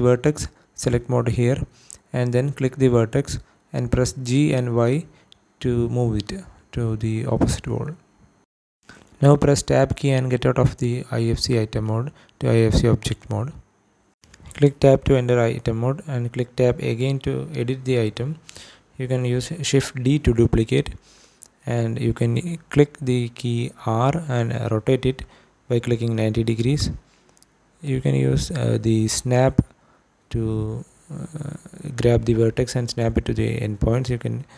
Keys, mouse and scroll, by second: 1.8 click, 2.7 g, 3.2 y, 4.3 click, 9.3 Tab, 9.6 Tab, 10.5-10.8 scroll up 3, 11.4 shift+middle click, 11.8 scroll down 2, 12.3 shift+middle click, 13.7 click, 14.4 Tab, 16.7 Tab, 17.5 click, 18.8 shift+d, 20.1 x, 22.6 click, 23.8 r, 24.6 KP_9, 25.6 KP_0, 26.3 KP_Enter, 27.5 scroll down 1, 28.1 shift+middle click, 28.5 scroll up 1, 30.4 g, 30.9 x, 31.9 click, 34.2 click.